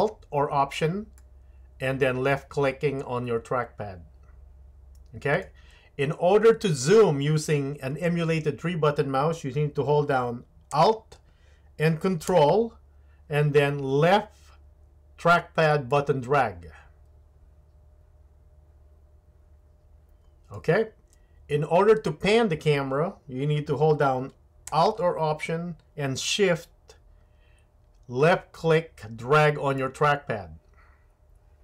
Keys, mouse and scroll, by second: 1.2-31.6 alt+middle drag.